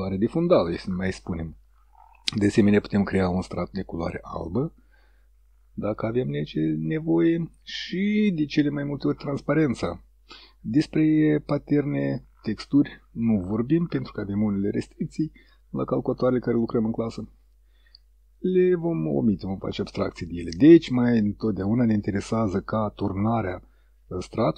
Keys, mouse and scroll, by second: 22.3 click.